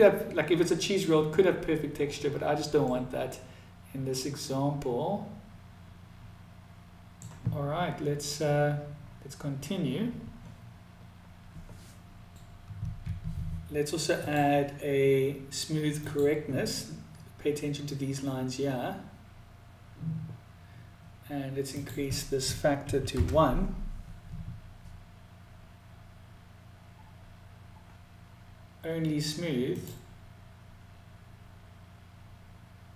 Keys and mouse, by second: 2.5-6.9 middle drag, 13.6-18.5 drag, 21.2-25.6 drag, 31.7 click.